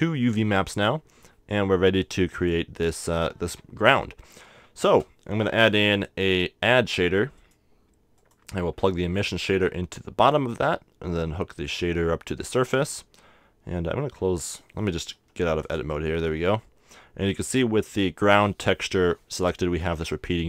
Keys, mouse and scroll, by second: 2.5-4.1 drag, 3.2 a, 4.1 a, 5.0 shift+a, 8.5-11.0 drag, 11.7-13.5 drag, 15.3 a, 15.8 Tab, 16.6 middle click.